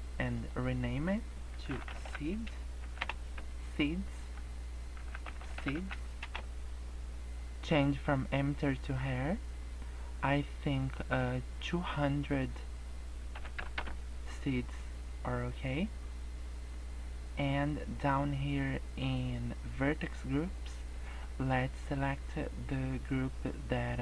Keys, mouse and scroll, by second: 0.2 click, 0.4 click, 1.8 e, 4.2 click, 5.4 e, 9.0 click, 9.9 scroll down 2, 12.3 click, 13.8 KP_0, 17.4-18.6 scroll down 20, 20.9 click, 21.2-21.6 scroll down 2.